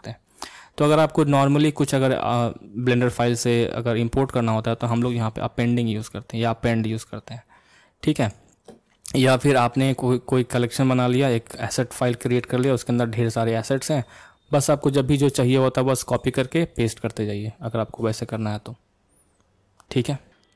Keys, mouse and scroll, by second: 16.7 click.